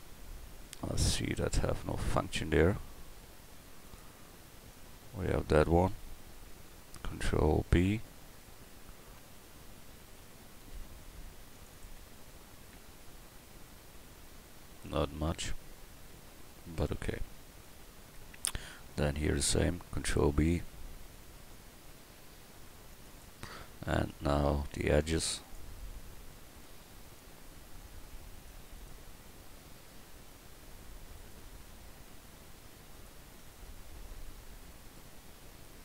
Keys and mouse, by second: 7.7 ctrl+b, 11.7 click, 12.1 Tab, 12.3-13.7 drag, 18.1 Tab, 18.8-20.0 right drag, 20.0 ctrl+b, 26.2 click, 31.2-33.7 drag, 33.7 middle click, 35.6-35.8 middle drag.